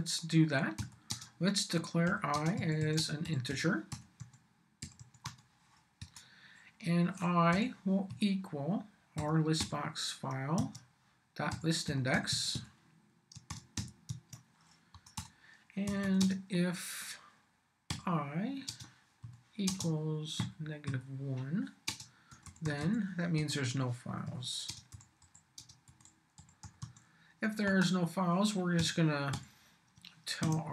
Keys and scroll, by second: 0.0-5.7 typing, 6.0 Return, 7.5 i, 8.1 =, 9.2 l, 9.6 b, 10.6 Tab, 11.3-14.3 typing, 14.9 Return, 15.6-16.5 typing, 17.9-27.3 typing, 23.4 Return, 27.7 Return, 28.8 m, 29.3 y, 29.9 shift+y, 30.4 shift+q.